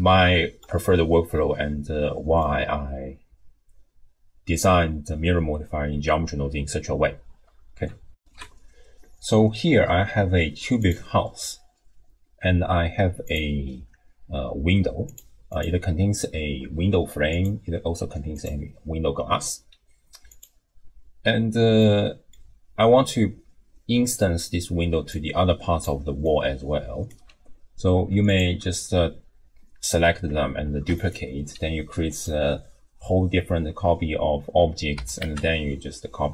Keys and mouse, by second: 0.3 shift+click, 1.3-2.5 drag, 8.2 ctrl+alt+shift+w, 8.3 ctrl+alt+shift+q, 13.3 click, 15.5 click, 18.3 click, 20.3 click, 21.9 middle click, 22.4-26.2 d, 25.1 click, 26.3 click, 27.1 d, 27.3 d, 30.7 shift+d, 35.0 r.